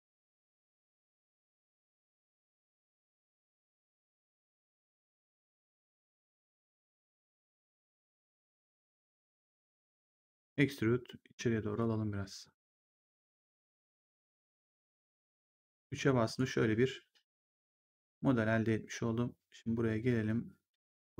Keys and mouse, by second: 0.0 shift+click, 2.5 shift+click, 7.4 shift+click, 10.3 click, 11.7 click, 15.1 right click, 15.7 3, 16.1 click, 17.8 click, 18.4 1.